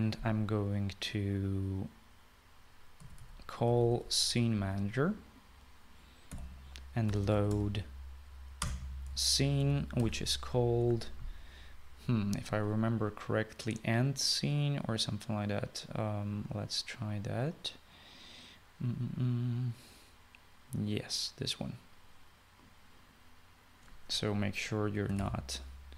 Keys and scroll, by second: 3.8-5.4 typing, 7.3-9.0 typing, 9.7 Return, 10.4-11.5 typing, 25.8-25.9 typing.